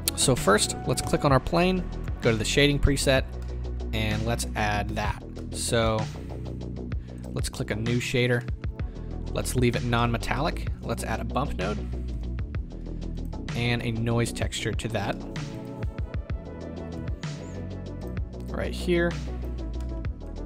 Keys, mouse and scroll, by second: 0.4-1.1 middle drag, 1.1 click, 3.4-4.4 middle drag, 4.4-5.1 scroll down 2, 7.3 click, 7.6 scroll up 1, 14.9 drag, 15.1-18.0 middle drag, 15.6 shift+a, 19.4 click.